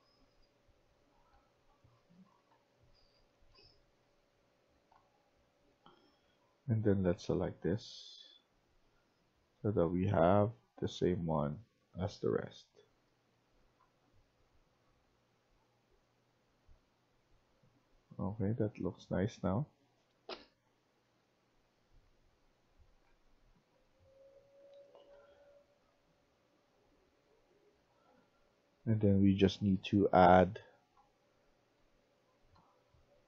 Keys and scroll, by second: 0.0-5.8 typing, 12.0-13.6 typing, 14.7-33.2 typing.